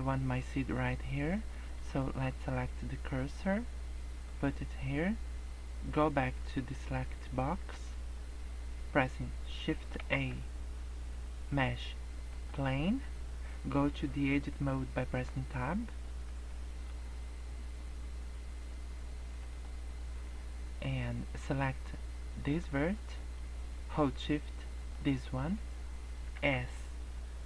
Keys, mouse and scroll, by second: 22.4 click, 24.8 shift+click, 26.3 s.